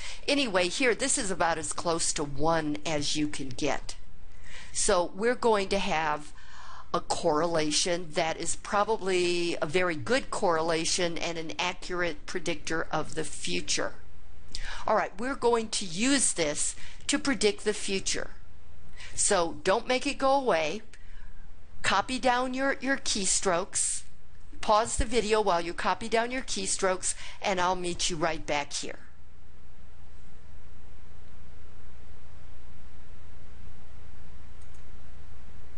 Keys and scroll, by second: 30.2 Return.